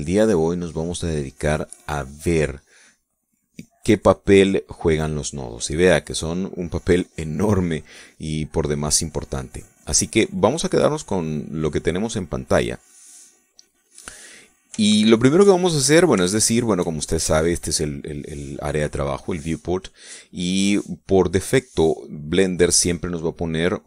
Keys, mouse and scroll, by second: 11.3 middle click, 11.9-13.6 drag, 13.8 click, 15.4 shift+middle click, 16.4-18.0 shift+middle drag, 20.8 middle click.